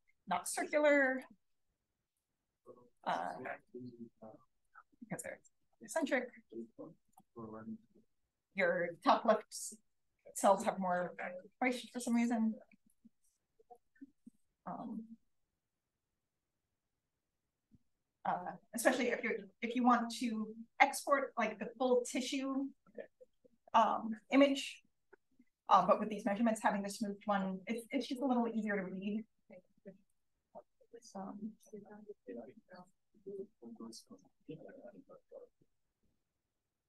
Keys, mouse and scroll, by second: 0.1-1.1 scroll up 1, 1.1-2.0 scroll up 1, 2.0 click, 2.0 right click, 2.0-3.0 scroll up 1, 3.0-3.6 scroll up 1, 3.6-4.9 scroll up 1, 5.3-5.9 scroll up 1, 5.9 click, 5.9 right click, 5.9-7.1 scroll up 1, 7.1-8.2 scroll up 1, 8.2-9.4 scroll up 1, 9.4-12.2 scroll up 1, 12.2-13.8 scroll up 1, 13.8-14.3 scroll up 1, 14.3-14.8 scroll up 1, 14.8-15.7 scroll up 1, 15.7-16.3 scroll up 1, 16.3-17.5 scroll up 1, 17.5-21.4 scroll up 1, 21.4-22.9 scroll up 1, 22.9-29.7 scroll up 1, 29.7-30.0 scroll up 1, 30.0 click, 30.9-31.6 scroll up 2, 31.6 scroll up 1, 32.4-33.3 scroll up 2, 33.3-34.3 drag.